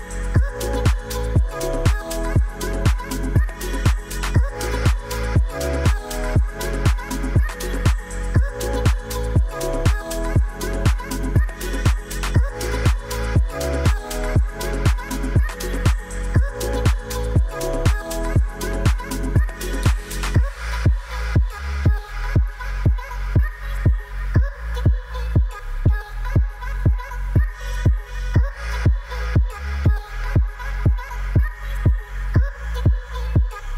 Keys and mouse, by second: 1.1 click, 1.5 ctrl+s, 2.1-2.6 drag, 2.9 drag, 4.7 click, 6.7 click, 7.9 click, 8.9 ctrl+s, 9.2-10.1 middle drag, 10.4 middle drag, 11.5 h, 12.2 click, 12.6-13.3 middle drag, 14.0 right click, 14.9 click, 15.1 click, 15.4 right click, 15.9 click, 16.1 right click, 16.7 click, 16.9 right click, 17.9 right click, 18.6 click, 18.9 click, 19.1 right click, 19.6 click, 19.7 right click, 20.3 click, 20.8 click, 21.2-21.8 right drag, 21.9 right click, 22.4-23.2 middle drag, 23.2 drag, 24.6 click, 25.3 ctrl+a, 25.4 ctrl+a, 25.8 click, 26.5 click, 26.8 ctrl+a, 26.9 ctrl+a, 27.4 click, 27.9 click, 28.1 ctrl+a, 28.3 ctrl+a, 28.6 click, 29.2 click, 29.4 ctrl+a, 29.6 ctrl+a, 30.4 click, 31.4 click, 31.9 click, 32.4 ctrl+a, 32.6 ctrl+a.